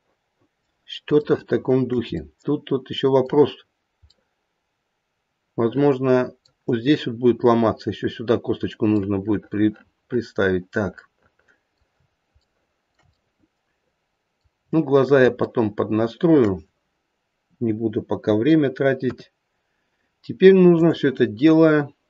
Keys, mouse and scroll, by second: 1.3 shift+middle click, 1.9 shift+middle click, 2.2 middle click, 2.5 middle click, 4.2 middle click, 5.1 middle click, 8.9 middle click, 11.2 middle click, 12.4 shift+middle click, 13.1 middle click, 14.6-15.1 scroll down 2, 15.9 shift+middle click, 17.3 KP_3, 19.1 KP_1, 20.1-20.4 scroll up 1, 20.7 click, 21.7 scroll down 1.